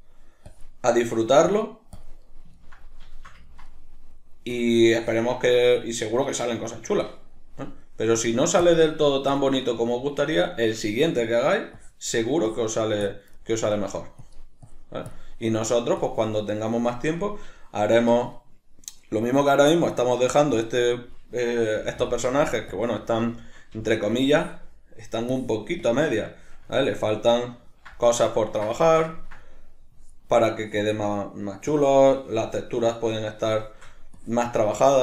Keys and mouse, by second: 0.5-0.9 drag, 0.9-1.5 middle drag, 1.5-2.2 drag, 2.2-4.5 middle drag, 4.5-5.7 drag, 5.7-8.2 middle drag, 8.2-9.6 drag, 9.6-11.8 ctrl+middle drag, 11.8-13.4 drag, 13.4-14.2 middle drag, 14.2-16.6 drag, 16.6-20.6 middle drag, 20.6 click, 21.2-22.1 middle drag, 21.8 f, 22.1 click, 22.4 f, 22.8 click, 22.9-24.2 middle drag, 23.8 f, 24.2 click, 24.9-25.4 middle drag, 25.4-26.4 drag, 26.4-30.0 shift+middle drag, 30.0-31.0 drag, 31.0-31.7 middle drag, 31.7-33.2 drag, 33.2-34.1 middle drag, 34.1-34.7 drag, 34.7-35.0 shift+middle drag.